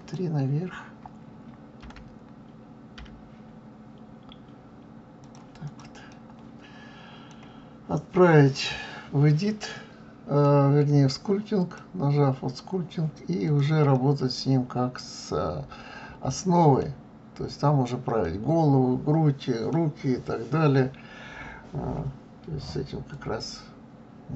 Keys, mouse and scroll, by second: 1.8 g, 5.6 click, 6.1-9.1 middle drag, 9.7-11.6 middle drag, 11.6-13.5 drag, 13.9-16.9 middle drag, 18.2-21.2 middle drag, 23.1-24.3 drag.